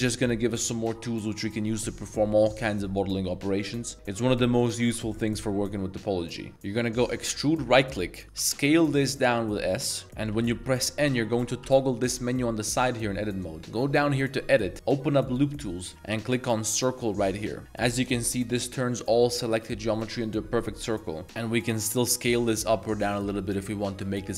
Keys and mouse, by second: 7.1 e, 8.4 s, 10.0-11.6 typing, 15.3 click.